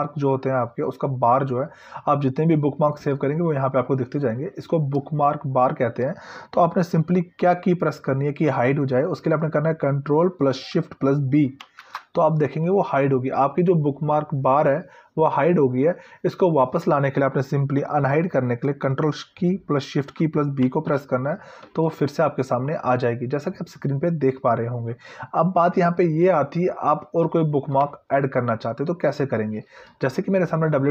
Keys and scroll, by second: 11.8 ctrl+shift+b, 20.8 ctrl+shift+b.